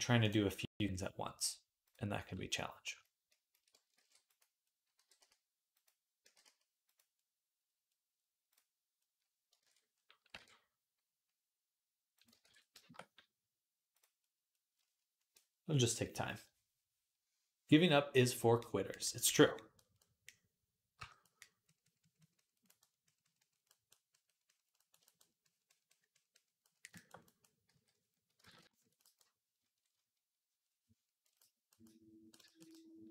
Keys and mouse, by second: 0.1-1.7 drag, 1.7-12.1 middle drag, 3.8 alt+d, 4.8 g, 6.1 g, 8.3 click, 9.4 ctrl+Tab, 10.2 r, 12.3 ctrl+r, 13.7 click, 14.1-21.5 middle drag, 20.8 j, 21.5-33.1 drag, 27.5 d, 28.3 ctrl+z, 32.5 middle click, 32.8 middle click.